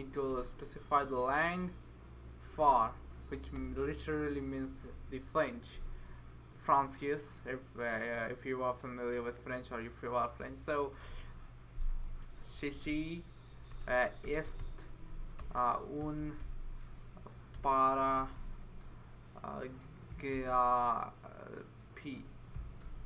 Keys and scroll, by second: 0.3 Return, 2.1-3.1 typing, 3.5 Return, 4.5 Right, 4.8 Tab, 11.1-22.8 typing.